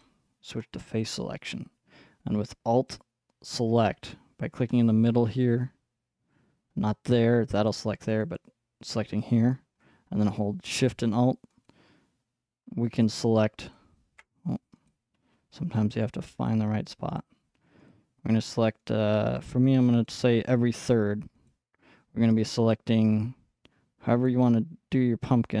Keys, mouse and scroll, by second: 0.0-2.6 drag, 2.9-6.4 alt+drag, 7.9-10.8 alt+drag, 11.7 alt+shift+click, 13.0 click, 13.6-25.6 alt+shift+drag.